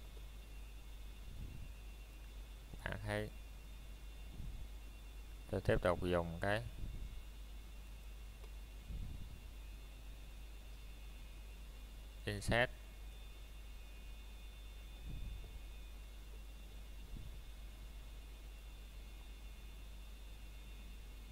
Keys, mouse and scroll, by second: 1.6 f, 2.3 middle click, 7.1 scroll up 1, 9.5 middle click, 9.8 scroll down 1, 11.5 s, 15.1 click, 15.6-16.0 scroll up 1, 16.4 middle click, 18.6 Tab, 19.5 click.